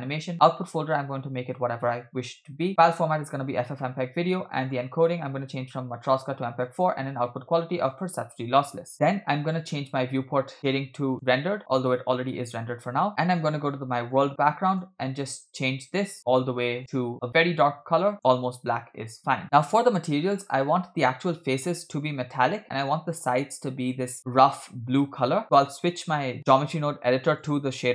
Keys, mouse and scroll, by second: 0.3 scroll down 1, 0.4-1.7 drag, 1.2 /, 2.7-3.8 drag, 4.2-4.6 scroll down 1, 4.6 click, 4.9-5.9 scroll down 1, 5.9 scroll down 1, 6.0-6.8 drag, 7.2-8.2 drag, 8.9 scroll up 5, 11.1 click, 14.1 click, 14.7 click, 18.8-19.2 scroll down 2, 20.4-20.9 scroll up 3, 22.8-23.3 middle drag, 27.4-27.9 drag.